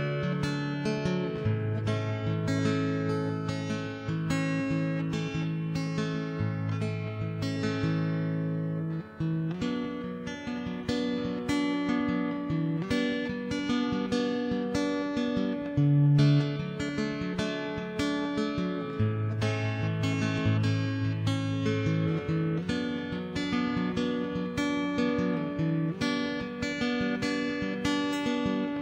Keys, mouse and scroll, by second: 0.6 ctrl+KP_Add, 0.7 middle click, 1.3 ctrl+KP_1, 1.4 middle click, 2.0 middle click, 2.5 middle click, 3.1 click, 3.4 ., 4.4 middle click, 4.8 ctrl+s, 5.2 ctrl+Tab, 5.5 right click, 6.4 s, 6.6 Escape, 7.0 right click, 7.5 ctrl+z, 7.6 ctrl+z, 7.7 middle click, 8.0 click, 8.0 right click, 8.3 middle click, 8.6 s, 9.3 ctrl+,, 9.5 s, 9.8 middle click, 10.7 middle click, 11.2 click, 11.3 right click, 11.5-12.1 scroll up 1, 12.1 right click, 12.2-13.0 scroll down 1, 12.8 s, 13.5 middle click, 14.3 ctrl+KP_1, 14.8 Tab, 15.0 shift+h, 15.3 Tab, 15.4 middle click, 15.7 click, 16.5 middle click, 16.8 right click, 17.4 click, 17.6 middle click, 17.8 ctrl+b, 18.5 middle click, 18.9 middle click, 19.8 super+right click, 20.2 middle click, 20.6 right click, 20.8 middle click, 21.4 ctrl+b, 22.0 middle click, 22.4 right click, 22.5 middle click, 22.7-25.8 typing, 23.4 middle click, 24.2 middle click, 25.0 middle click, 26.0 middle click, 26.4 ctrl+s, 26.8 middle click, 27.2 click, 27.7 middle click, 28.2 middle click, 28.5 middle click.